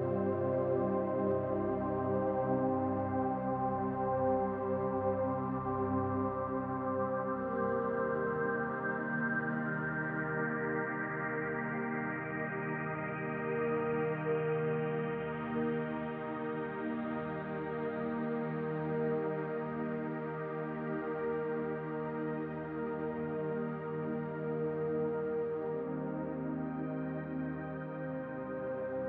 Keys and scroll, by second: 5.1-6.7 typing, 15.3-16.4 typing, 20.5 ctrl+a.